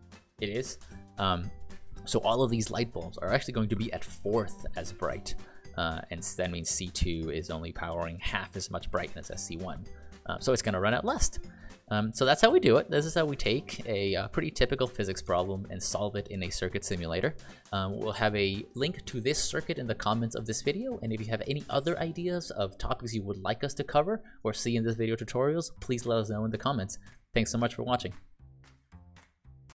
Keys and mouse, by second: 12.6 ctrl+click, 15.4 ctrl+click.